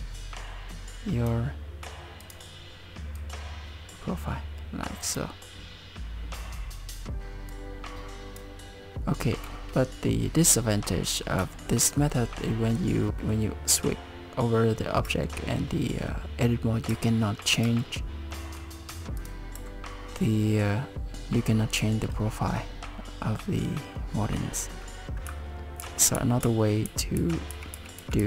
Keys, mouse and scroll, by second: 2.2 click, 3.2 click, 7.6 click, 9.0 click, 10.4 middle click, 11.1 middle click, 11.4 Tab, 11.8 middle click, 12.5 middle click, 13.1 Tab, 13.2 middle click, 15.1 Tab, 16.9 Tab, 17.6 Tab, 18.3 middle click, 19.2 click, 19.6 Tab, 25.8 ctrl+z, 26.2 ctrl+z, 26.4 ctrl+z, 26.9 ctrl+z, 27.2 ctrl+z, 27.5 ctrl+z, 27.8 ctrl+z, 28.0 ctrl+z, 28.2 ctrl+z.